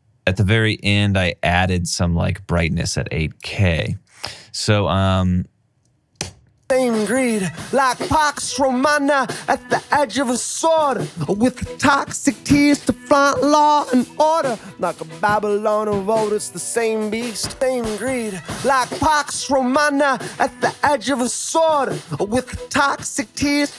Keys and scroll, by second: 3.8 alt+super+w, 6.3 space.